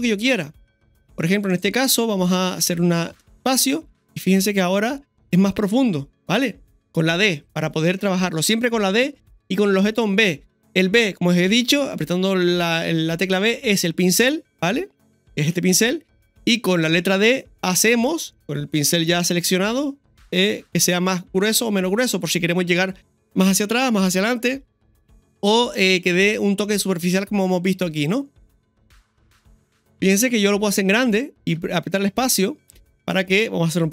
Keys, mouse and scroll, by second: 28.7-31.3 scroll down 3.